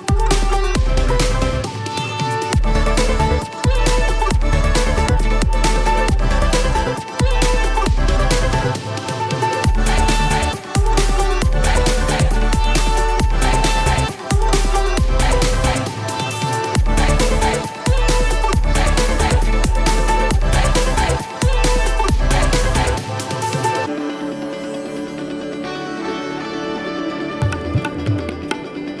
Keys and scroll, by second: 1.9 space, 10.6 space, 18.2 space, 24.3 space, 25.0 space.